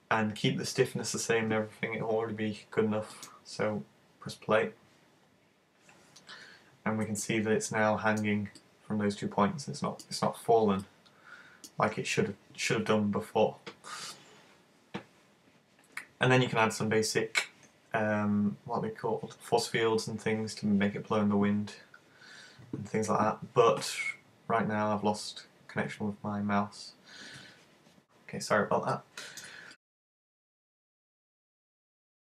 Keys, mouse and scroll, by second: 3.1 click, 7.2 middle click, 8.7 middle click, 10.9 middle click, 29.0 middle click.